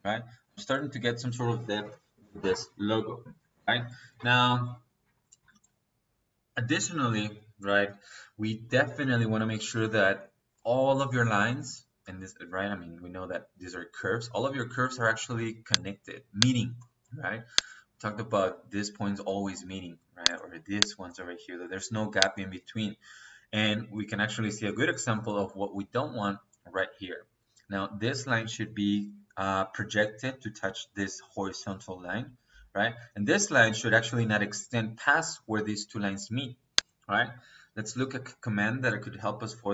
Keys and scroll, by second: 39.5 Escape.